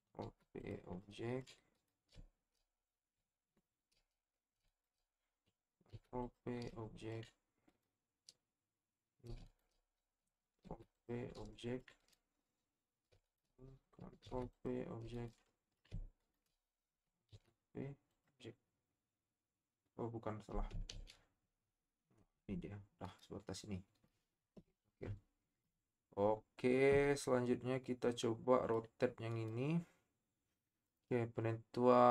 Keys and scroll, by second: 0.2 ctrl+p, 5.9 ctrl+shift+p, 10.6 ctrl+shift+p, 14.2 ctrl+shift+p, 17.3 ctrl+shift+p, 20.9 ctrl+z.